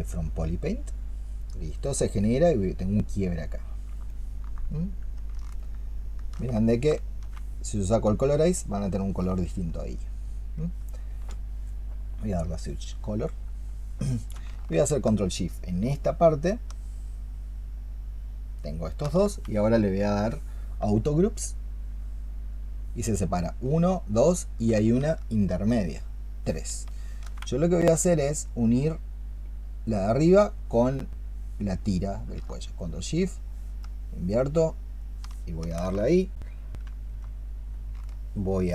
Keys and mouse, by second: 3.3 double click, 3.9 alt+click, 5.0 alt+click, 15.6 ctrl+shift+click, 25.2 ctrl+shift+click, 32.6 ctrl+shift+click, 33.7 ctrl+shift+click, 34.9 ctrl+shift+click, 38.6 ctrl+shift+click.